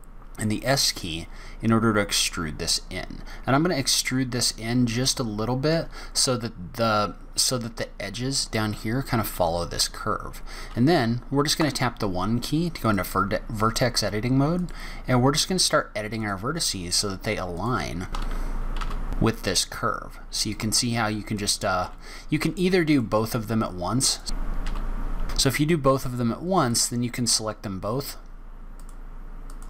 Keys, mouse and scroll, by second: 11.6 1, 12.8 click, 14.6 click, 16.2 shift+click, 16.6 shift+click, 17.5 click, 18.3 g, 21.3 click, 21.8 g, 24.0 click, 24.3 g, 24.6 click, 24.9 g, 25.8 click, 26.5 click, 28.8 shift+click.